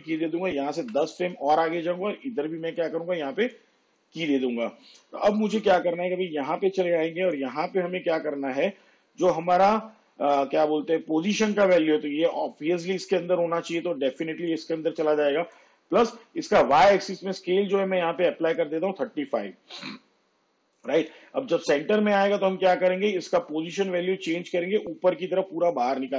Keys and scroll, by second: 0.8 shift+Page_Down, 17.9 3, 18.2 5.